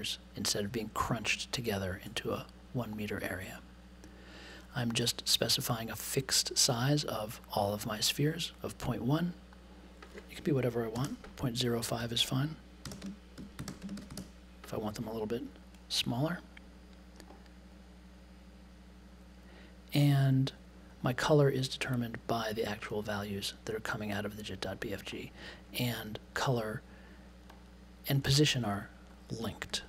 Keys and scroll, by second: 10.7-14.6 typing.